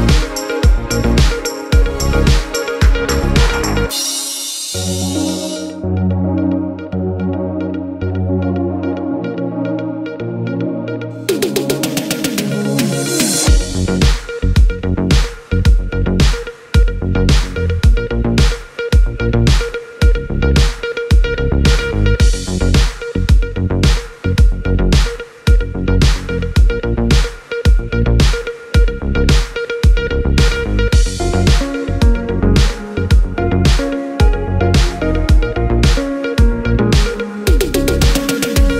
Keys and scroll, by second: 11.7 1, 12.2 2, 13.2 6, 13.7 Return, 31.5 2, 33.3 BackSpace, 35.5 2, 36.1 5, 37.0 2, 38.3 Return.